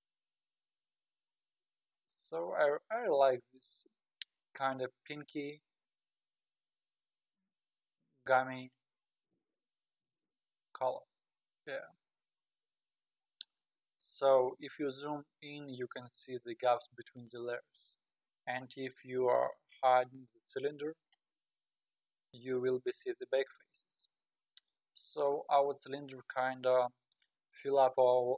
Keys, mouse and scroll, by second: 10.8-11.4 scroll down 7, 12.1 scroll down 4, 12.7-13.2 scroll down 4, 15.9-16.8 scroll down 10, 17.9 scroll up 2, 19.3 click, 20.5 click, 22.3 scroll down 2, 23.7-25.2 scroll up 18, 26.3-28.1 scroll down 19.